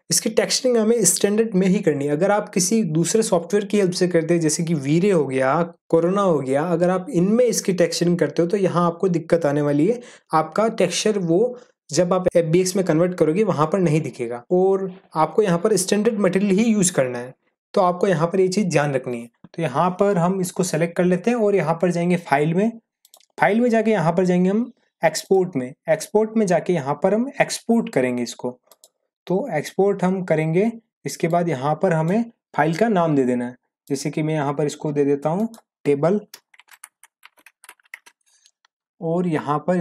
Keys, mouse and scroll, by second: 23.0 click, 28.7 click, 31.2-32.2 drag, 36.3-38.4 typing.